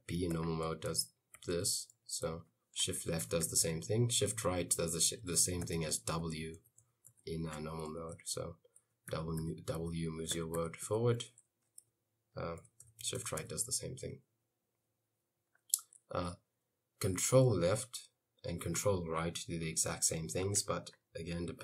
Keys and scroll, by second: 0.0-2.3 typing, 3.0 shift+Left, 3.3 shift+Left, 3.5 shift+Left, 5.1 shift+Right, 5.4 shift+Right, 5.7 shift+Right, 6.2 shift+Right, 6.6 shift+Right, 6.8 shift+Right, 7.1 shift+Right, 7.3 shift+Right, 8.2 e, 9.8-13.1 typing, 12.9 shift+Right.